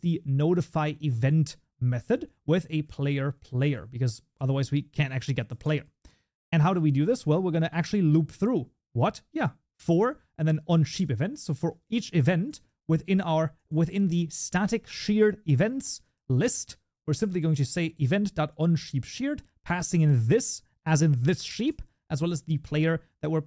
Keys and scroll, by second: 3.4 Tab, 6.3 Delete, 10.8 Tab.